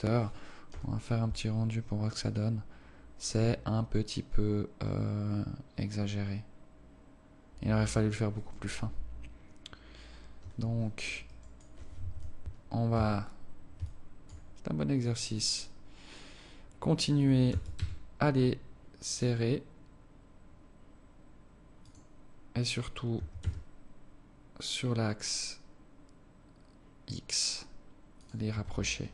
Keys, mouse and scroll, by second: 10.4 Escape, 11.3 right click, 11.7 right click, 12.2 KP_7, 13.0 Tab, 13.9 alt+shift+click, 14.7 scroll up 1, 17.5 s, 23.2 s, 28.6 Tab.